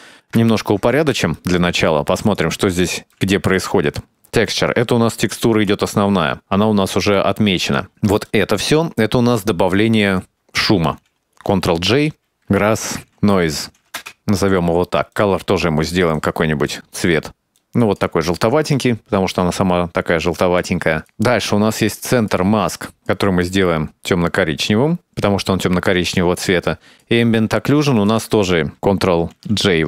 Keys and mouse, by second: 0.7 ctrl+space, 1.4 middle click, 2.4 right click, 2.8 ctrl+x, 3.2 middle click, 4.5 click, 4.7 click, 5.4 click, 6.2 middle click, 7.2 click, 7.8 click, 8.3 click, 8.7 click, 9.1-10.3 drag, 10.5 click, 11.5 ctrl+j, 12.1-14.3 drag, 13.1 s, 14.8 click, 15.7 click, 16.4 click, 16.8 click, 18.8 click, 18.9 click, 19.2 click, 20.3 middle click, 21.3 click, 22.0 click, 22.6 click, 25.7 click, 26.9 click, 27.3 shift+click, 27.7 shift+click, 29.1-29.5 drag.